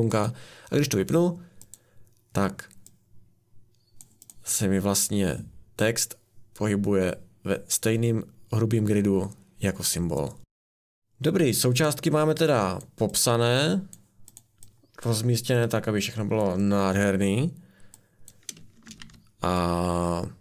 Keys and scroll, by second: 11.0 ctrl+z, 18.8 r, 19.0 r.